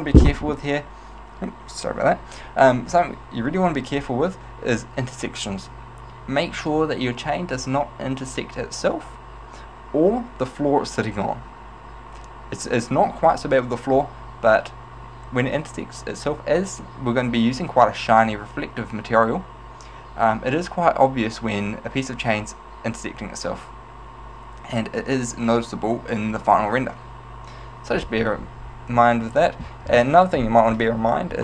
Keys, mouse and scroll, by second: 29.1 middle click, 30.1 middle click, 30.8-31.4 scroll up 1.